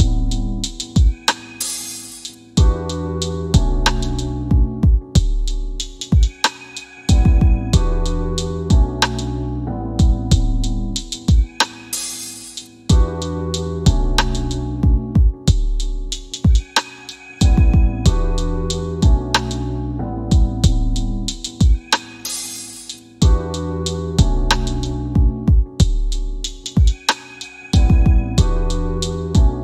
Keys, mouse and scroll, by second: 0.7 click, 2.2 scroll down 1, 4.7 click, 7.3 scroll up 1, 8.7 scroll down 1, 10.7 scroll up 1, 11.3 middle click, 13.8 scroll down 1, 14.4 scroll down 1, 14.8 click, 19.1 w, 19.9 w, 20.4 scroll down 1, 22.6 click, 27.1 KP_8, 27.9 KP_8, 29.1 click.